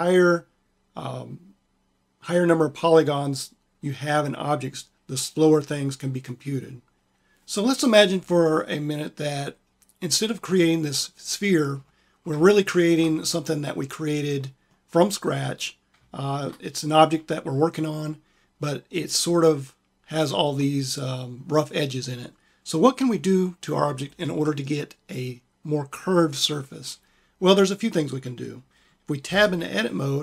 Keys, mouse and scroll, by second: 10.4 middle click, 15.5 click, 29.2 Tab.